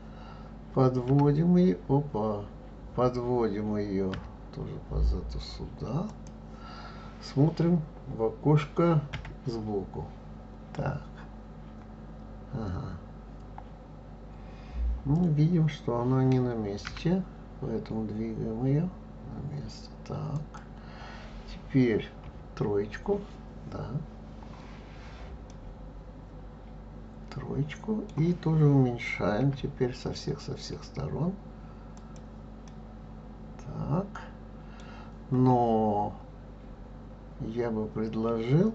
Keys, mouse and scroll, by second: 1.1 g, 9.1 KP_1, 12.7-13.4 scroll up 2, 13.9-16.8 scroll up 1, 16.8 g, 22.2 KP_3, 24.2 scroll up 1, 24.7 scroll down 1, 25.5-28.5 middle drag, 29.4 s, 32.6-35.7 middle drag.